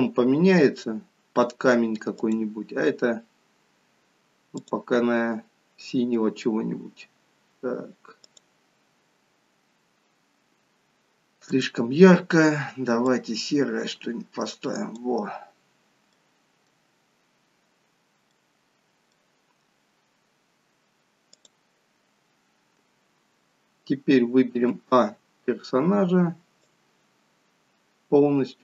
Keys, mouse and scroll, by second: 16.9 middle click, 17.2-17.8 scroll up 1, 17.8 scroll down 3, 18.2 middle click, 21.3 click, 26.6 click.